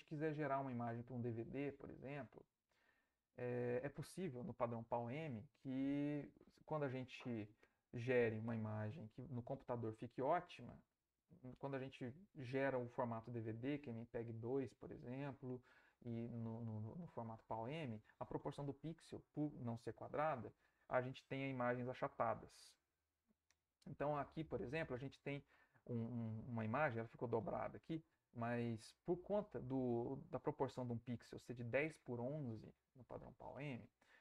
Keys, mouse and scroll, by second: 2.8 Right.